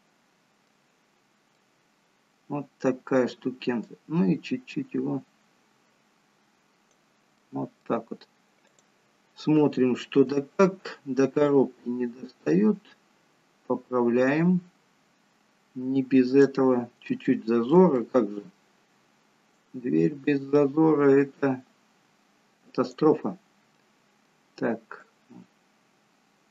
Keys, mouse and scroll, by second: 2.3 middle click, 3.9 click, 7.4 middle click, 8.8 click, 10.3-11.5 scroll up 2, 11.5 click, 17.2 shift+middle click, 18.0 middle click, 20.5 click, 23.8 middle click, 25.1 click.